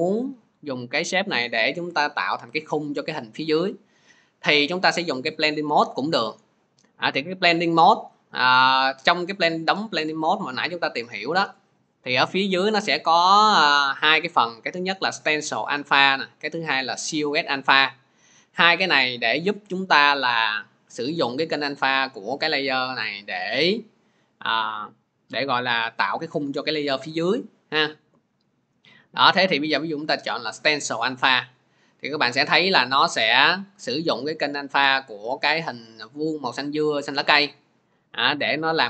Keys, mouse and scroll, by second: 2.4 click, 8.8 click, 30.6 click, 32.8 click, 33.4 click, 36.2 click.